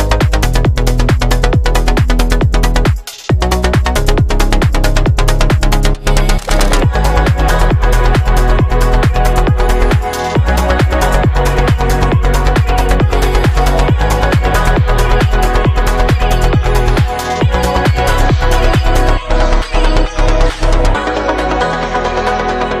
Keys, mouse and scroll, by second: 1.7 KP_7, 2.4 KP_1, 2.7 shift+a, 8.4 KP_2, 9.5 KP_6, 13.9 middle click, 14.9-19.4 drag, 15.8 KP_0, 19.4-19.8 middle drag, 19.8 click, 19.9-22.2 middle drag, 22.2-22.8 drag.